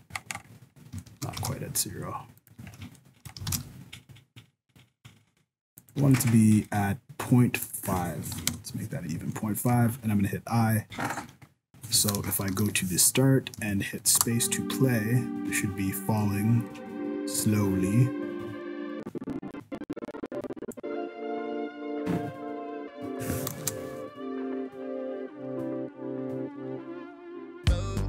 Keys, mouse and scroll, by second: 0.1-0.6 scroll down 4, 0.6-0.9 scroll up 3, 1.0 shift+middle click, 1.3 g, 2.6 scroll up 2, 2.8 shift+scroll down 1, 2.9 shift+scroll up 1, 3.0 shift+middle click, 3.4 g, 6.2 middle click, 7.6 click, 9.3 shift+middle click, 10.9 i, 11.3-11.7 scroll down 6, 12.5 shift+Left, 13.2-13.8 scroll up 4, 13.7 shift+middle click, 14.2 space, 15.3 scroll up 2, 15.8-16.2 scroll down 1, 16.2 middle click, 18.9 click, 23.6 KP_0.